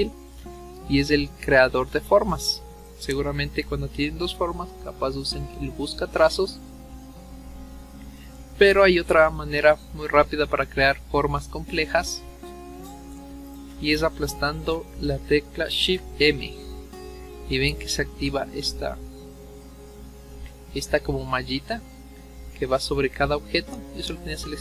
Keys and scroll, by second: 15.4 shift+m.